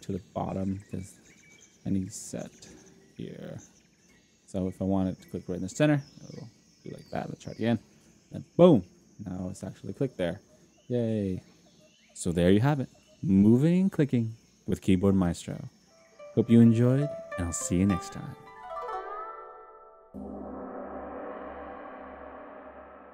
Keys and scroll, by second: 2.4 0, 4.1 0, 8.0 F10.